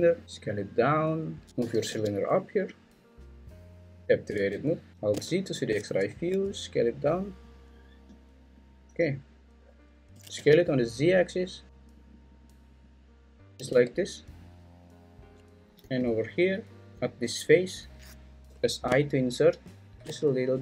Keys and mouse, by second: 0.2 s, 1.6 g, 1.9 z, 4.0 Tab, 4.0 `, 4.5 `, 4.9 alt+z, 6.3 s, 7.5 click, 10.1 s, 10.3 z, 13.4 click, 13.7 `, 15.8 3, 18.5 i.